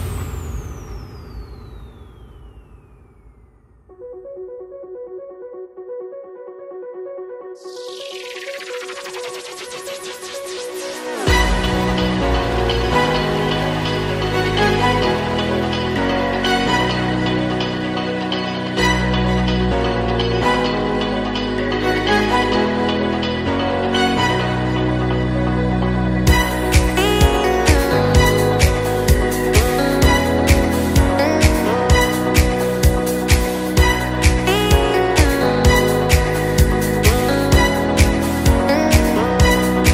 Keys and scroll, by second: 3.4 Down, 3.9 Right, 5.4 super+Return, 7.3 Down, 8.0 super+Down, 13.5 shift+Left, 13.9 shift+Down, 14.4 super+Down, 22.1 Return.